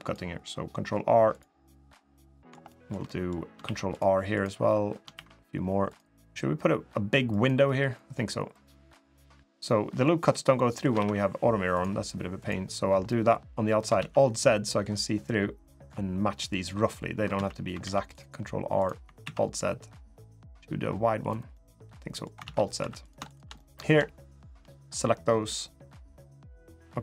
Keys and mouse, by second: 2.0 shift+middle click, 2.4 shift+middle click, 2.8 middle click, 3.4 ctrl+r, 4.9 ctrl+r, 7.4 3, 9.1-10.6 middle drag, 10.0 typing, 10.8 ctrl+r, 12.8 middle click, 13.7 alt+z, 14.3 middle click, 15.0-16.4 drag, 17.1 alt+z, 17.6 ctrl+r, 19.0 alt+z, 20.1-21.1 drag, 21.3 middle click, 22.2 alt+z, 22.6 3, 22.8 click, 23.0 shift+click, 23.3 middle click, 24.0 shift+click, 24.4 middle click, 26.3 middle click.